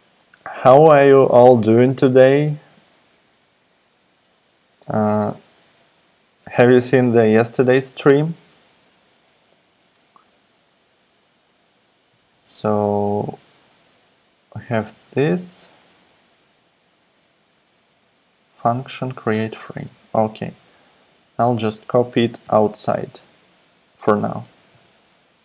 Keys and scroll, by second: 22.4 super+x, 24.5 Return, 24.7 super+v.